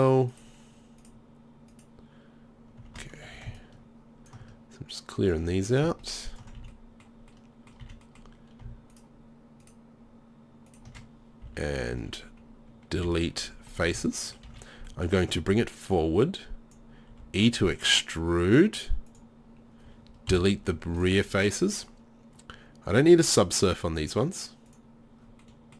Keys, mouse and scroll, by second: 3.2 z, 6.6 z, 6.9 ctrl+click, 7.8 z, 8.9 right click, 11.1 middle click, 11.4 z, 11.9-13.0 middle drag, 11.9 z, 13.0 Delete, 13.9 z, 14.5 a, 15.9-17.2 drag, 17.2 e, 20.3 Delete, 25.4 click, 25.5 middle click.